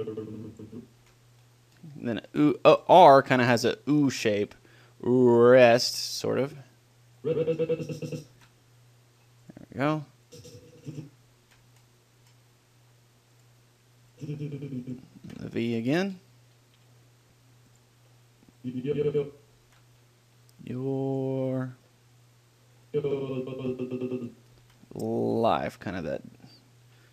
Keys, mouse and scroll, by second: 0.0-1.7 drag, 1.3 ctrl+l, 1.4-3.7 middle drag, 6.7 middle click, 7.5-9.8 drag, 8.7 ctrl+l, 10.6-12.5 drag, 11.7 ctrl+l, 14.4-16.1 drag, 15.6 ctrl+l, 16.1 middle click, 18.9-20.7 drag, 20.0 ctrl+l, 22.3 middle click, 23.2-24.7 drag, 24.9 ctrl+l.